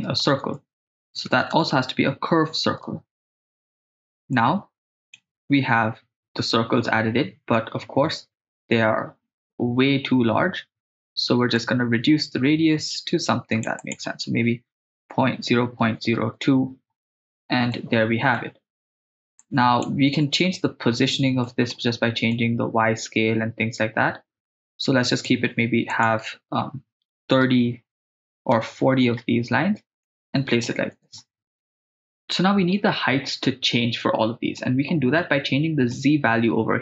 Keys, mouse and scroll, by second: 0.5 shift+a, 3.7 click, 3.8 click, 4.3-5.2 drag, 11.6 click, 13.8 click, 16.1 click, 17.7 scroll down 1, 17.7 scroll up 1, 17.8 middle click, 19.8 click, 21.4 middle click, 22.4-25.4 drag, 25.9-28.6 drag, 30.1-30.7 middle drag, 31.8 click, 34.6 middle click, 35.9 click.